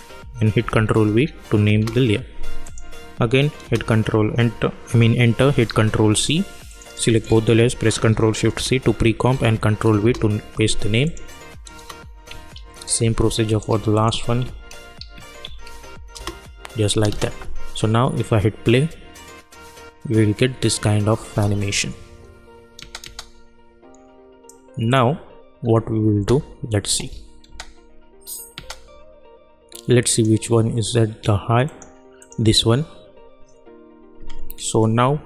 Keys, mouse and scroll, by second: 0.5 ctrl+v, 1.7 Return, 2.6 click, 3.6 Return, 5.6 ctrl+c, 6.1 click, 7.1 shift+click, 8.3 ctrl+shift+c, 9.2 ctrl+v, 10.0 Return, 11.0 click, 11.8 Return, 12.5 ctrl+click, 12.8 ctrl+click, 13.9 shift+click, 14.9 ctrl+shift+c, 15.6 ctrl+v, 16.1 Return, 17.1 space, 21.2 space, 24.4 click, 25.5 scroll up 1, 26.1 space, 27.0-27.4 scroll down 1, 27.4 space, 30.0 click.